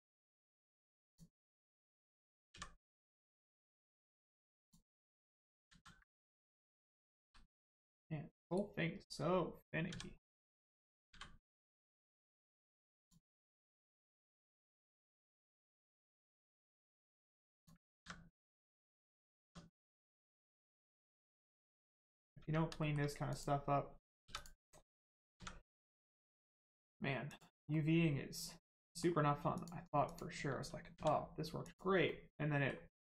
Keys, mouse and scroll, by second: 0.2 middle click, 1.0 click, 2.5 x, 5.7 ctrl+z, 6.1 middle click, 7.2 g, 8.4 right click, 9.0-9.3 scroll down 1, 10.2 middle click, 13.0 click, 15.2 click, 17.8 ctrl+z, 18.6 middle click, 19.0 scroll down 1, 19.4 Tab, 19.7 middle click, 21.3 shift+middle click, 21.6 middle click, 21.6 middle click, 22.0-22.4 scroll up 1, 22.4 Tab, 22.8 shift+middle click, 23.3 click, 24.2 3, 24.3 click, 24.9 middle click, 25.2 scroll up 1, 27.2 click, 27.7 middle click, 29.5 click, 30.9 x, 31.6 click, 32.1 middle click.